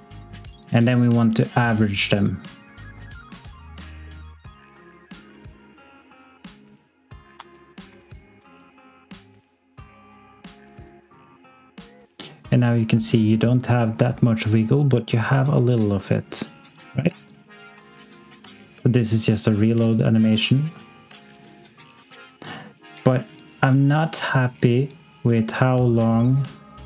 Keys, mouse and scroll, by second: 4.7 x, 7.1 scroll down 1, 7.3 s, 8.0 alt+click, 8.5 click, 18.8 x, 23.1 click.